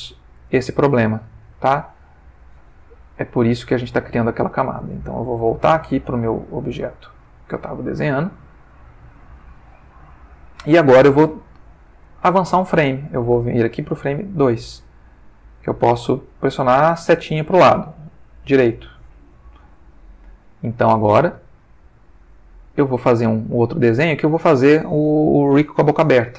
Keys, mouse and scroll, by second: 0.6 ctrl+shift+middle click, 3.4 click, 5.0 click, 6.7 click, 8.4 click, 9.5-10.5 ctrl+middle drag, 13.3 click, 15.0-15.8 drag, 16.2 click, 18.4 Right, 19.9 middle click, 21.7 click, 22.5-23.5 ctrl+middle drag.